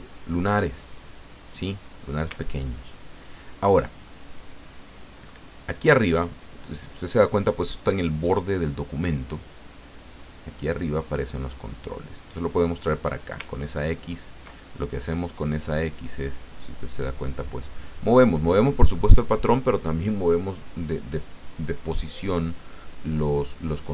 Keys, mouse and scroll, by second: 2.6-2.9 ctrl+scroll down 2, 4.0-6.1 ctrl+drag, 10.3-13.3 drag, 13.5-14.1 ctrl+scroll up 2, 16.5-23.9 drag.